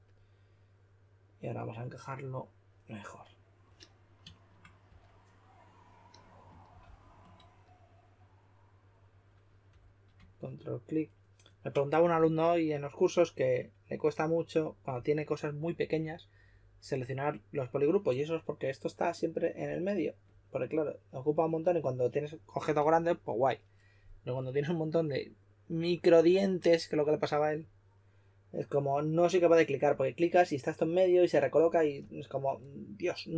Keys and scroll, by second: 4.8 w, 6.7 shift+f, 9.6 w.